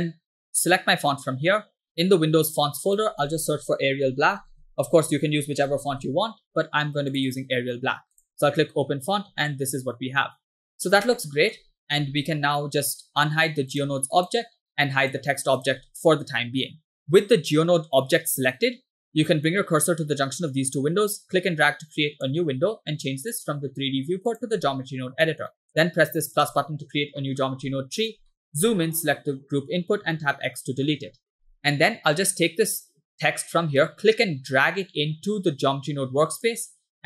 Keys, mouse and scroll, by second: 1.2 click, 9.5-10.8 shift+middle drag, 11.4 shift+middle click, 14.0 click, 14.4 click, 15.2 click, 15.8 click, 17.1 drag, 20.9-22.3 drag, 23.3-24.5 drag, 25.5 middle click, 26.4 drag, 27.2 middle click, 27.6-28.0 scroll up 5, 28.3 middle click, 29.0 click, 30.1 x, 33.8 click, 34.0 click.